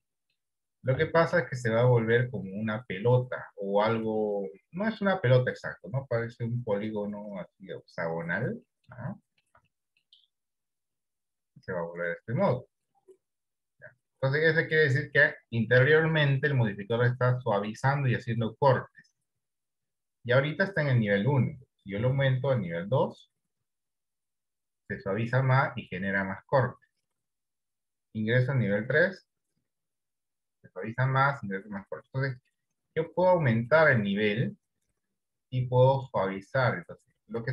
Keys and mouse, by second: 0.3 middle click, 1.4 shift+middle click, 2.5-8.5 middle drag, 9.1 shift+middle click, 9.5 middle click, 9.9 ctrl+middle click, 11.3-12.6 middle drag, 29.1 click, 33.8-36.7 middle drag.